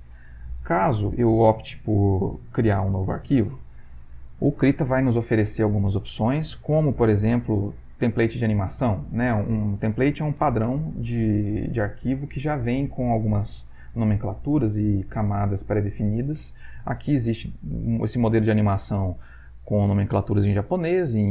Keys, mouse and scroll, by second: 7.1 click, 20.7 click, 21.2 click.